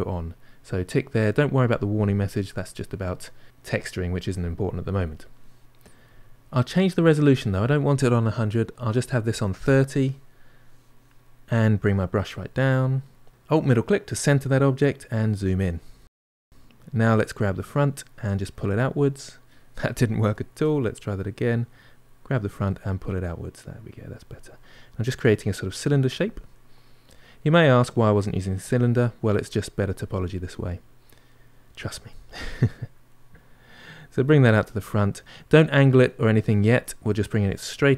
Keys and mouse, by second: 11.6 f, 13.7-15.2 ctrl+middle drag, 15.2 f, 17.0-18.3 drag, 18.3-20.1 middle drag, 20.1 ctrl+z, 20.6 middle click, 21.4-22.5 drag, 22.5-23.6 middle drag, 23.6-25.1 drag, 25.1 middle click, 25.9 click, 26.3-28.1 middle drag, 28.1 click, 28.7 middle click, 29.4 click, 30.1-31.2 middle drag, 31.2 click, 31.6 middle click, 32.2 click, 32.6 middle click, 33.3-35.1 drag, 35.1-36.6 middle drag, 36.6-37.6 drag, 37.6-37.9 middle drag.